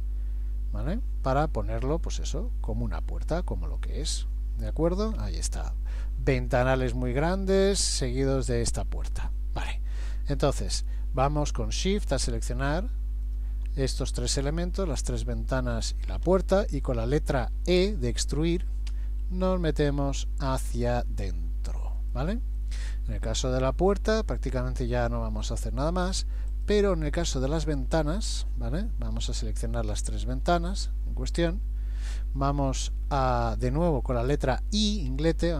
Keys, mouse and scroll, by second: 4.4 middle click, 4.9-6.0 scroll down 4, 11.9 shift+click, 12.5 shift+click, 13.3 shift+click, 16.6 middle click, 18.9 e, 22.6 middle click, 26.6 click, 28.3 click, 29.7 shift+click, 30.1 shift+click, 30.4 click, 32.4 middle click, 35.1 i.